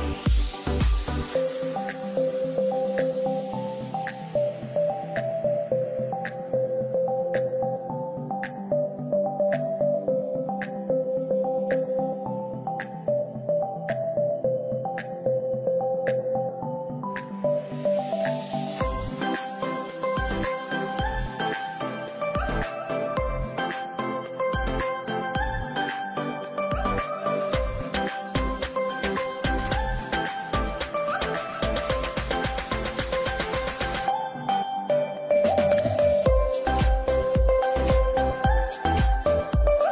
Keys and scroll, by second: 1.9 Escape, 2.3 F2, 6.1 F3, 7.1 c, 7.4 F3, 11.5 Escape, 12.4 F8, 12.9 shift+Home, 13.5 shift+d, 13.8 shift+a, 13.9 shift+t, 14.2 shift+e, 14.6 ctrl+space, 15.9 c, 16.3 Escape, 16.5 F4, 19.1 F2, 23.9 space, 39.2 space.